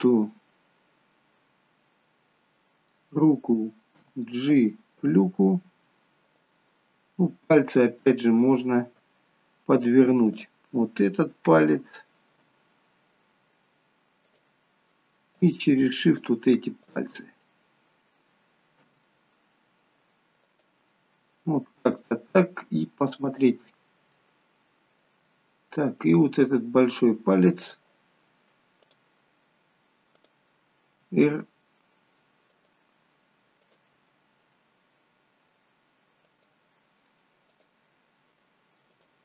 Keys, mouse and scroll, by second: 0.0 middle click, 4.1 g, 7.6 click, 8.1 middle click, 10.4 click.